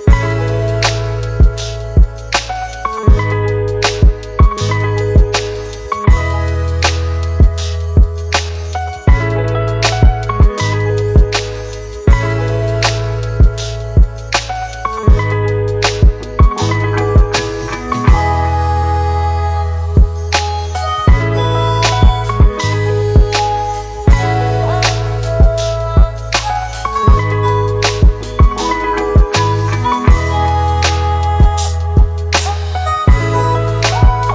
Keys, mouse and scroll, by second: 1.6 Return, 5.3 ctrl+t, 9.4 ctrl+t, 19.9 Return, 31.8 typing, 33.2 double click.